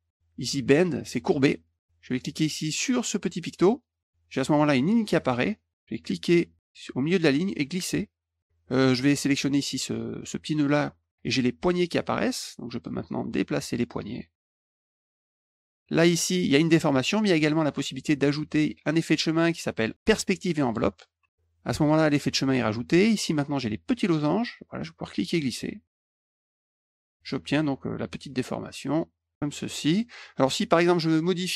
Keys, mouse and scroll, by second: 1.4 click, 3.7 click, 6.2-8.4 drag, 9.7 click, 12.1 click, 14.3 click, 18.9 click, 20.7 click, 24.2 click, 25.9 click, 26.8 click, 27.3 click, 28.9 click, 29.3 click.